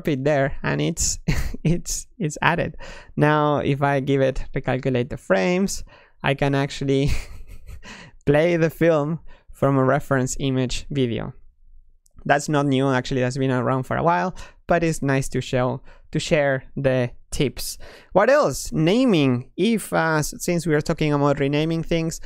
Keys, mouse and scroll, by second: 1.4-2.3 drag, 3.7-7.9 drag, 13.0-17.1 drag, 18.6-21.8 middle drag.